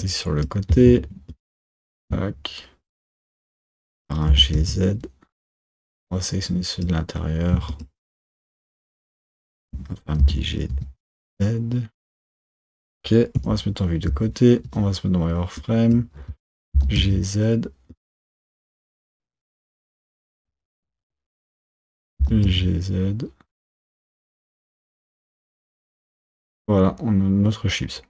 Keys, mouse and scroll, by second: 1.4 shift+click, 4.4 g, 6.0 click, 8.2 shift+click, 8.9 shift+click, 9.5 shift+click, 10.3 g, 13.5 KP_1, 14.2 z, 15.7 click, 16.9 g, 18.4 KP_1, 19.2 KP_1, 19.8 click, 20.9 KP_1, 21.5 shift+click, 22.3 g, 25.1 z, 25.5 Tab.